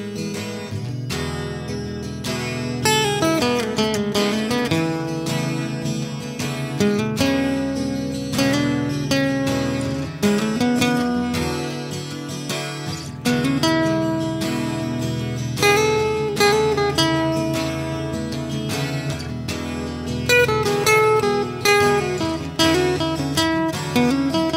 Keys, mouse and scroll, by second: 0.9-2.6 drag, 3.1 ctrl+KP_Subtract, 3.6 a, 4.4-4.7 middle drag, 4.7-6.8 drag, 6.8 middle drag, 9.9-11.4 drag, 13.3 ctrl+a, 13.3-14.1 middle drag, 14.1 click, 15.0-16.1 middle drag, 16.1-17.5 drag, 17.5 space, 18.5 BackSpace, 18.6 BackSpace, 19.4 Down.